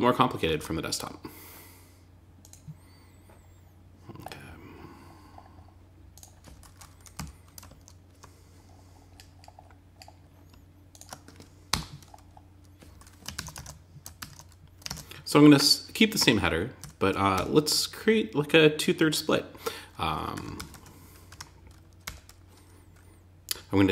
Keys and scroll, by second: 6.5 Down, 12.7 super+s, 12.9 super+Tab, 13.5 super+r, 14.2 super+Tab, 16.1 Tab, 20.1 Tab, 20.6 Return.